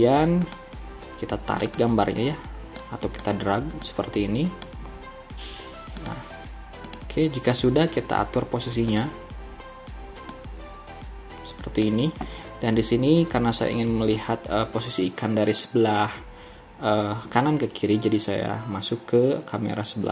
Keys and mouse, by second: 10.6-20.0 drag, 20.0 KP_3.